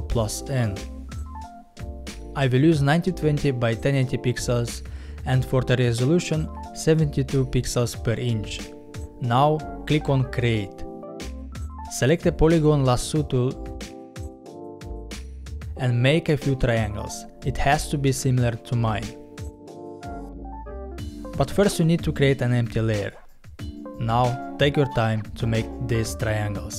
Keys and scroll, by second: 11.7 l.